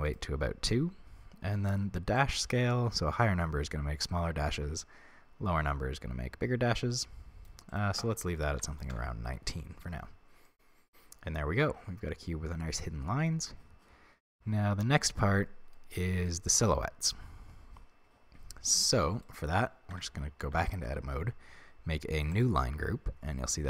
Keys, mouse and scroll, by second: 0.1 click, 2.2-10.5 drag, 9.0 Return, 10.5-19.3 middle drag, 19.3 right click, 19.9 Tab, 20.6 a, 22.3 click.